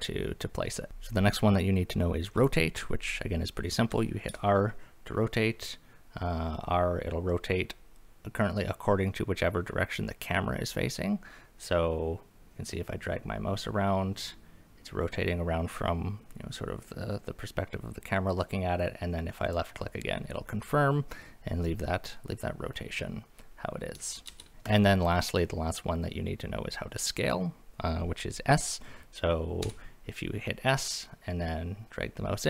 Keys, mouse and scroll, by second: 0.9 Escape, 4.3 r, 19.4 click, 24.3 ctrl+z, 24.7 click, 29.6 s.